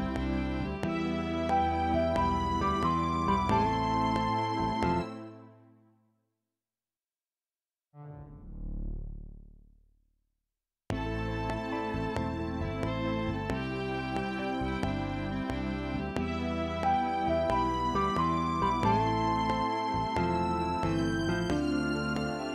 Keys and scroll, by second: 5.0 space, 9.9 Delete, 10.8 space, 13.4 ctrl+Left, 13.8 ctrl+Up, 18.4 ctrl+s.